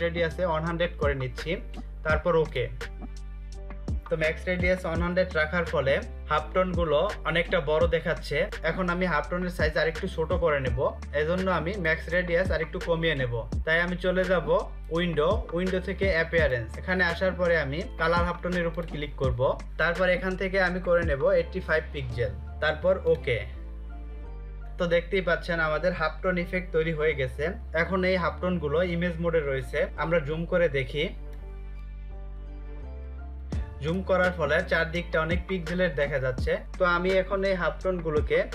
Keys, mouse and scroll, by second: 2.0 click, 8.4 click, 14.6 click, 18.3 click, 20.9-21.7 typing, 22.6 click, 29.8 space, 30.1 ctrl+click, 30.1 space, 30.6 space, 31.2 click, 31.5 space, 32.5 ctrl+click, 36.6 click.